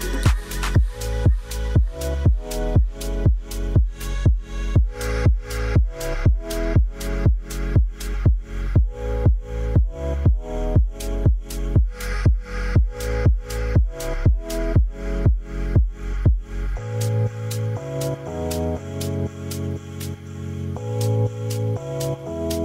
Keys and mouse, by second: 1.8 BackSpace, 5.5-8.1 drag, 12.3-14.5 drag, 15.7-19.1 drag, 21.0-22.6 drag.